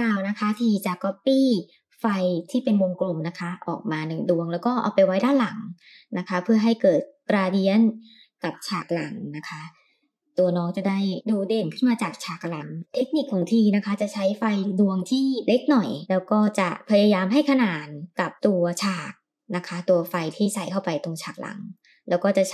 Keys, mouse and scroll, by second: 0.0 KP_7, 1.3-1.8 scroll up 3, 2.2 shift+d, 5.3 r, 7.8 KP_3, 8.7 r, 10.3 g, 13.3 s, 14.9-16.4 drag, 16.4 KP_0, 18.0 g, 18.6 r, 21.6 g.